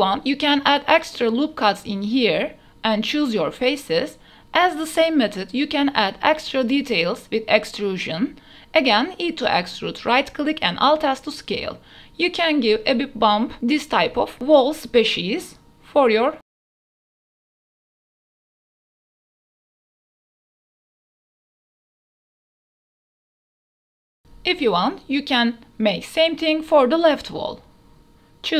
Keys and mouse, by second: 2.4 ctrl+r, 3.9 click, 5.0 3, 5.9 alt+click, 6.5 e, 7.3 x, 10.2 shift+click, 10.9 s, 11.1 z, 12.4 g, 12.6 x, 13.3 shift+click, 13.8 ctrl+r, 14.3 ctrl+r, 14.9 click, 15.2 click, 15.7 3, 15.8 alt+click, 16.7 shift+click, 17.0 shift+click, 17.5 shift+click, 17.9 shift+click, 18.5 click, 18.8 shift+click, 19.0 shift+click, 20.1-20.5 drag, 20.7 e, 21.5 alt+s, 23.7 shift+click, 24.0 ctrl+r, 24.9 shift+middle click, 25.1 shift+middle click, 25.3 g, 25.9 ctrl+r, 26.5 click, 26.9 alt+3, 27.0 alt+click, 27.3 click, 27.7 shift+click.